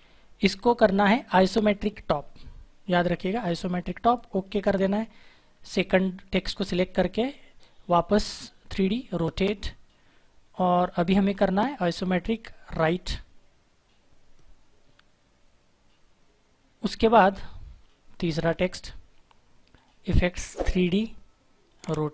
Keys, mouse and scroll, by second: 1.9 click, 4.3 click, 9.1 click, 17.2 click.